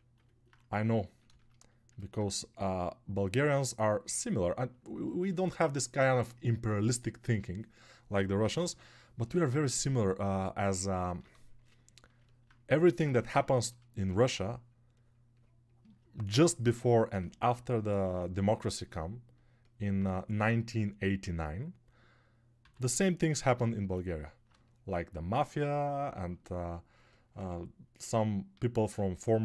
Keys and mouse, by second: 24.5-26.3 shift+drag, 24.5-26.3 shift+middle drag, 24.5-26.3 shift+right drag.